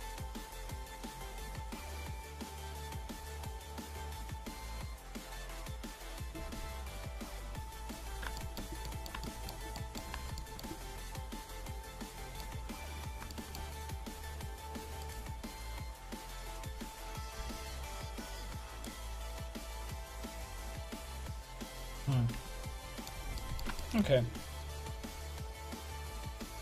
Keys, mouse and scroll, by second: 11.3-12.9 right drag, 12.9-14.1 middle drag, 14.1-19.5 right drag, 17.4 g, 19.5 Tab, 20.8 a, 21.9 a, 22.4 Tab, 26.4-26.6 drag.